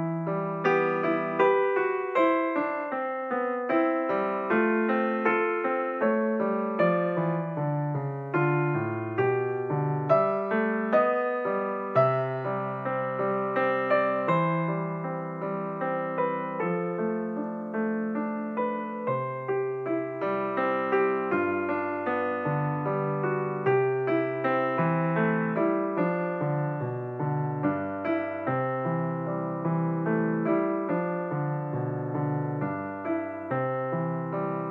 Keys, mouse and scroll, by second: 2.0 KP_7, 5.9 click, 6.6 click, 7.6 click, 14.7-17.9 drag, 20.0-20.7 scroll down 4, 20.8 s, 24.3 s, 28.3 click, 30.1 s, 33.0-33.7 scroll up 4, 33.7-34.7 scroll down 6.